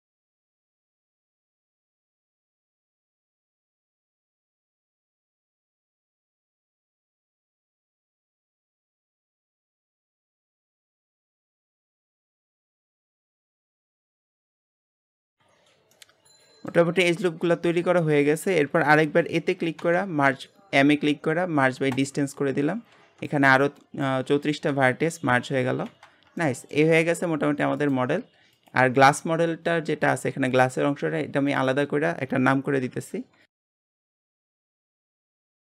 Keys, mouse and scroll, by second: 0.0 click, 0.2 alt+shift+click, 1.1 alt+shift+click, 1.7 shift+middle click, 1.9 scroll up 1, 2.0 shift+middle click, 2.5 click, 3.0 shift+middle click, 3.4 alt+shift+click, 4.1 shift+middle click, 4.4 ctrl+r, 4.7 click, 5.0 shift+middle click, 5.2 click, 5.4 scroll down 1, 5.5 shift+middle click, 5.9 alt+shift+click, 6.1 x, 6.5 shift+middle click, 7.2 scroll up 1, 7.4 ctrl+r, 7.7 click, 8.1 ctrl+r, 8.3 click, 8.7 shift+middle click, 8.8 scroll up 1, 8.9 ctrl+r, 9.8 click, 10.2 alt+shift+click, 10.4 click, 10.7 shift+middle click, 11.0 ctrl+r, 11.1 click, 11.5 ctrl+r, 11.8 click, 12.1 shift+middle click, 12.4 ctrl+r, 12.7 click, 13.0 ctrl+r, 13.3 click, 13.6 shift+middle click, 13.8 ctrl+r, 14.1 click, 14.4 ctrl+r, 14.6 click, 15.0-15.6 scroll down 4, 15.0 shift+middle click, 15.9-18.6 shift+middle drag, 18.6 a, 19.8 m, 22.4-25.4 scroll down 1, 25.7 alt+a, 26.0 Tab, 26.4 middle click, 26.8 g, 28.5 click, 30.1 g, 31.5 click, 31.7-33.4 drag, 33.4 s, 33.8 BackSpace, 35.0 s, 35.6 middle click.